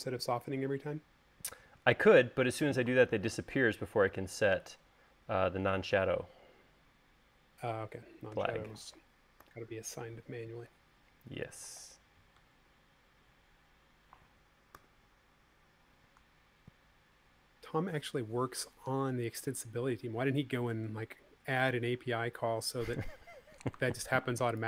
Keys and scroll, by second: 9.9 u, 15.2 u.